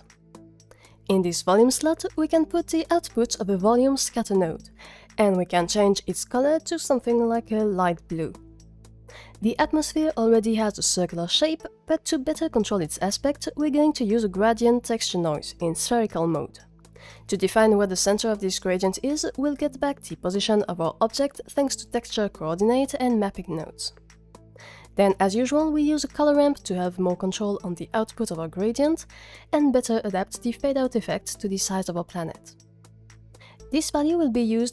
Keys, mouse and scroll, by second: 1.0 click, 1.2 x, 1.6 shift+a, 3.3-4.1 drag, 5.9 click, 12.2 click, 12.4 shift+a, 14.5-15.4 drag, 17.0 click, 17.2 shift+a, 17.7 o, 18.5 click, 18.6 shift+a, 19.8 p, 21.2-22.1 drag, 22.7-23.1 drag, 26.2 click, 26.4 shift+a, 29.2 click, 29.8 ctrl+z, 29.8 click, 30.7-31.1 drag, 31.2 g, 31.8 drag.